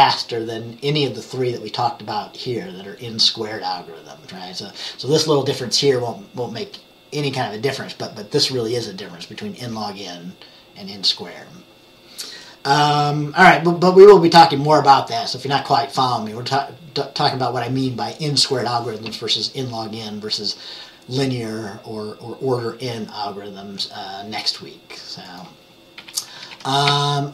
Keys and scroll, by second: 26.1 Page_Down, 26.5 Page_Up, 26.7 Page_Up, 27.0 Page_Up.